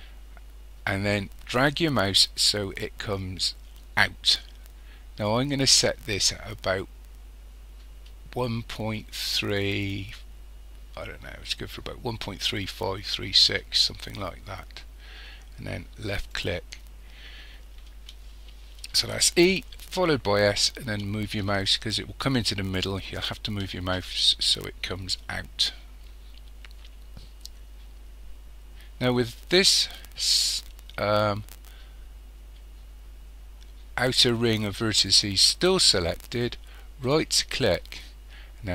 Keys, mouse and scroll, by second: 16.3 click, 37.1-38.7 right drag.